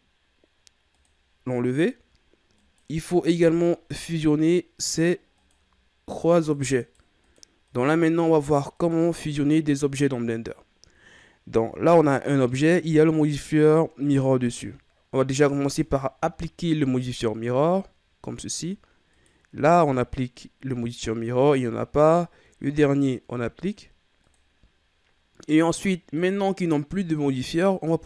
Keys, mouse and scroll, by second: 0.9 click, 2.5 right click, 3.9 right click, 4.9 right drag, 5.3 right click, 6.3 right click, 6.7 right drag, 7.2 right drag, 7.7 right drag, 8.1 right click, 8.7 right click, 9.2 right click, 15.8-18.8 drag, 19.1 right click, 22.0 right click, 23.6-26.1 drag, 26.1 right click.